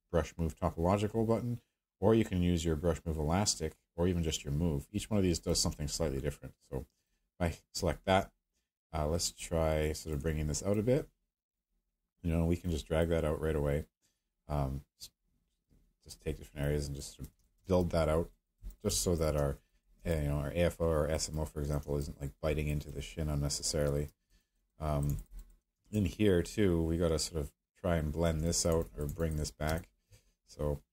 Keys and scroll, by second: 29.7 space.